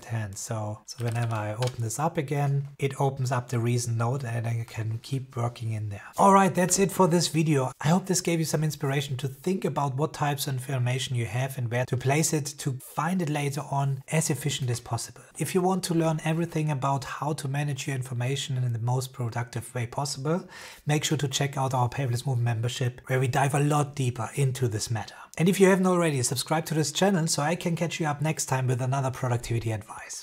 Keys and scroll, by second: 0.6-1.6 typing.